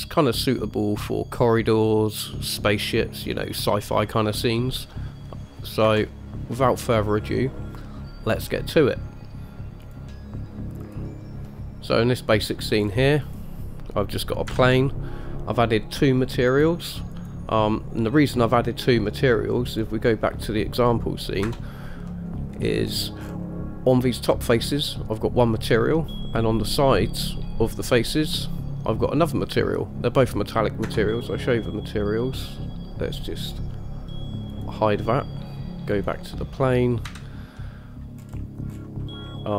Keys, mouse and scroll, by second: 4.8-5.2 middle drag, 6.0 KP_0, 10.0 click, 11.0 click, 11.6-12.1 middle drag, 13.0-13.5 scroll up 2, 13.4 click, 14.7 KP_Decimal, 16.7 click, 17.3 click, 20.3 drag, 21.6 KP_0, 22.3-22.8 middle drag, 23.1-23.9 scroll up 3, 31.1 KP_0, 34.7 click, 36.1 click, 37.2 KP_Decimal, 37.8-38.1 middle drag, 38.4-38.9 scroll up 2, 38.9-39.3 scroll down 1.